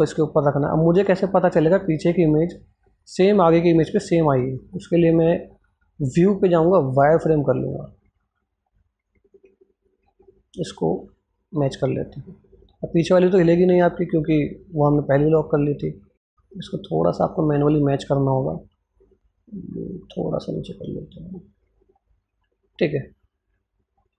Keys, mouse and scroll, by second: 1.0-1.6 scroll up 1, 1.6-4.2 drag, 8.8 Num_Lock, 8.8 Scroll_Lock, 8.8 click, 9.9-11.9 drag, 14.0-15.3 scroll up 1, 16.2 click, 16.9-17.6 scroll down 1, 17.7-19.7 drag, 21.1-22.6 drag.